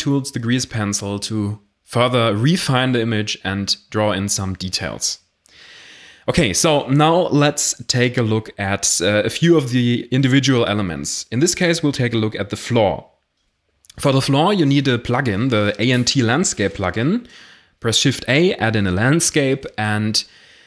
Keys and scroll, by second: 12.4 Escape, 12.7-13.3 typing, 15.6 shift+a.